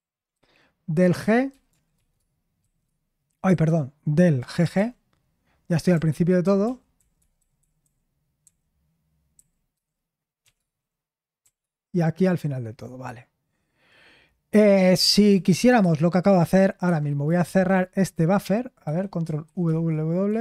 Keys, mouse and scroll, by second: 4.5-8.4 typing, 10.3-11.4 typing, 15.3-16.3 typing, 17.5 typing, 19.4 ctrl+w, 19.6 ctrl+w.